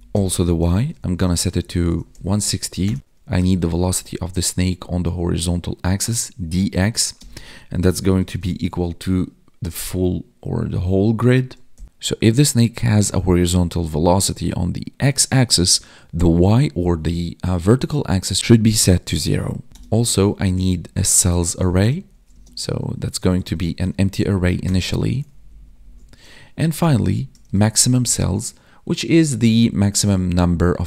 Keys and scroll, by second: 1.2 space, 7.1 space, 21.1 space, 22.3 space, 23.9 Right, 24.9 ctrl+s, 25.2 ctrl+Down, 29.2 space, 30.2 ctrl+s.